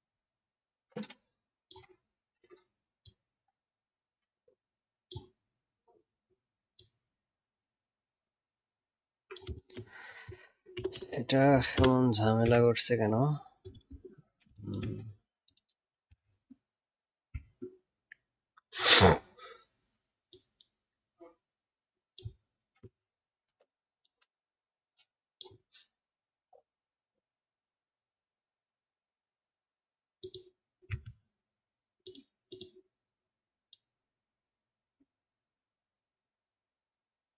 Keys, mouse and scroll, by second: 17.4-20.4 alt+scroll up 1.